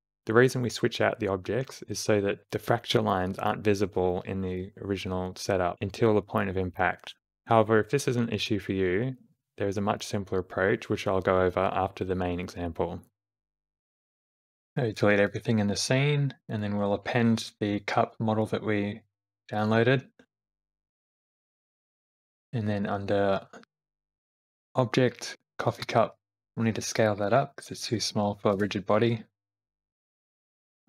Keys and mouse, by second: 1.6 click, 2.4-3.7 middle drag, 3.9-5.4 middle drag, 7.9 middle click, 8.0 space, 9.6 space, 10.2 shift+Left, 10.8 g, 10.8 space, 14.6 a, 14.9 x, 16.5-17.9 drag, 26.6 s.